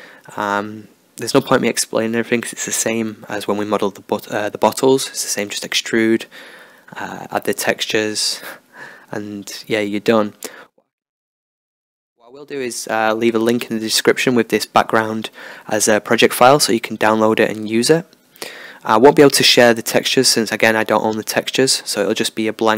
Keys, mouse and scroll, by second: 0.6 click, 0.6-2.1 right drag, 0.8 Tab, 1.7 click, 2.1 middle click, 3.5 middle click, 4.2-5.6 drag, 7.2 right click, 7.6-9.3 drag, 9.5 Tab, 9.7 middle click, 10.4 Tab, 10.6 middle click, 11.1 click, 11.6 middle click, 12.1 ctrl+KP_Add, 13.3 g, 14.0 p, 14.9 Tab, 15.4 right click, 15.7 g, 16.1-18.5 middle drag, 17.9 Tab, 18.5 ctrl+r, 21.0 click, 21.7-22.7 middle drag.